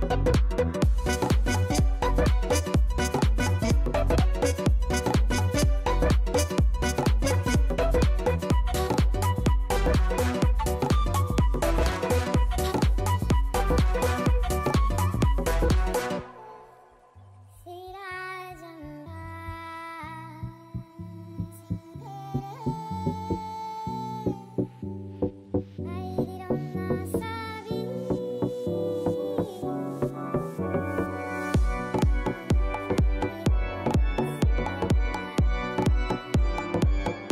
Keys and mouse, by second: 1.7 click, 5.3 click, 7.0 click, 8.6 alt+right click, 8.8 alt+click, 9.7 alt+right click, 9.9 alt+middle click, 10.9 alt+click, 11.7 click, 13.2 click, 13.6 click, 14.0 click, 15.3 click, 15.6 click, 16.0 click, 16.4 click, 17.2 alt+click, 18.6 click, 23.0 click, 24.3 alt+click, 25.1 click, 29.5 click, 32.0 click, 33.0 KP_6, 33.1 click, 34.2 click, 35.0 click.